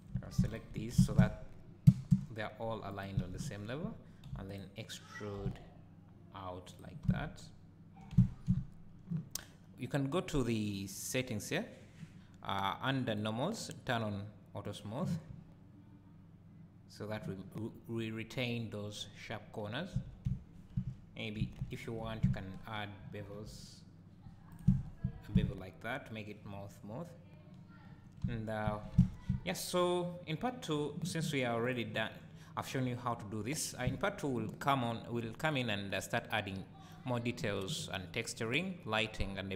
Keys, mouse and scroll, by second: 0.1 1, 0.5 alt+click, 0.9 s, 3.0 click, 3.2 alt+a, 4.3 3, 4.5 click, 5.4 e, 6.8 click, 7.0 `, 8.1 Tab, 8.5 `, 10.6 click, 11.1 scroll down 1, 13.1 click, 14.6 click, 15.3 `, 19.7 scroll up 2, 20.1 Tab, 21.4 2, 21.7 alt+click, 23.0 ctrl+b, 24.6 click, 24.7 Tab, 25.1 scroll down 1, 25.3 `, 28.2 Tab, 28.7 `, 28.9 Tab, 31.6 click, 34.9-35.5 scroll down 2, 38.6-39.5 scroll down 1.